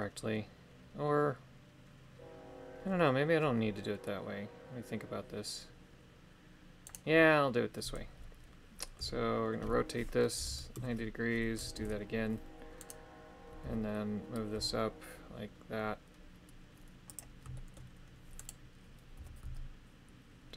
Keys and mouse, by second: 7.0 right click, 9.0 r, 11.7 shift+r, 12.8 right click, 13.6 g, 17.5 shift+middle click, 18.4 right click, 19.1 g.